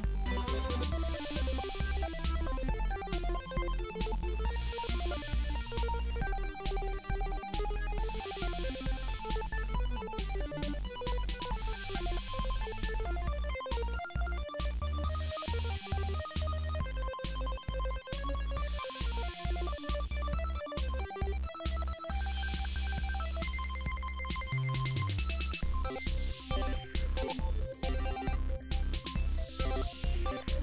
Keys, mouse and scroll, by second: 0.5 click, 0.8 middle click, 1.7-2.3 drag, 2.9-5.7 drag, 6.7 click, 6.9 s, 7.7 g, 8.6-12.7 drag, 12.7 KP_3, 13.0 g, 14.0-14.4 drag, 15.3 s, 15.7 g, 17.0 a, 18.4 ctrl+l, 19.1 a, 20.3 KP_3, 21.0 ctrl+l, 21.2 g, 23.3 g, 23.8 drag, 25.8-29.0 typing.